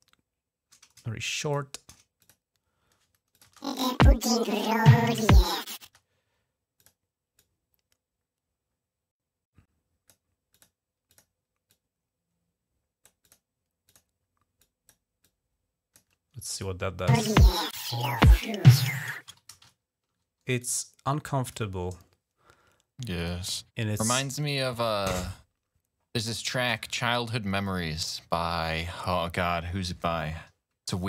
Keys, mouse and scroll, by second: 2.0 click, 3.1 click, 3.3 space, 4.4 ctrl+scroll down 1, 4.7 ctrl+scroll up 1, 5.6 typing, 6.6 click, 7.2-10.0 drag, 10.3 click, 10.9 click, 11.5-12.9 drag, 13.1 click, 13.7 click, 14.4 click, 15.1 click, 15.9 click, 15.9 typing, 16.4 click, 17.0 typing, 19.1 typing, 19.6 ctrl+scroll down 1, 20.4 click, 23.0 click, 24.3 right click.